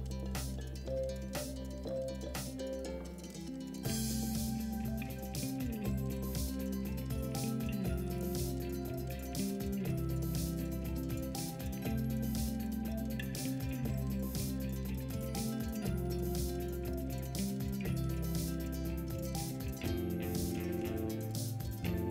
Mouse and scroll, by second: 5.5-6.1 middle drag.